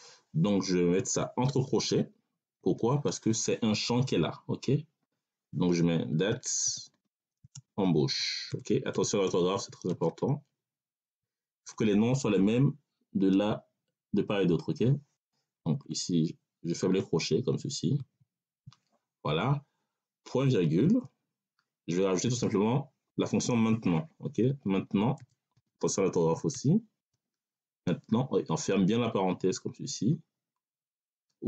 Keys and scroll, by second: 2.5 ctrl+alt+5, 6.1-9.9 typing, 11.5 3, 15.7 BackSpace, 17.8 ctrl+alt+[, 20.7 ., 24.3-26.9 typing, 28.8 5.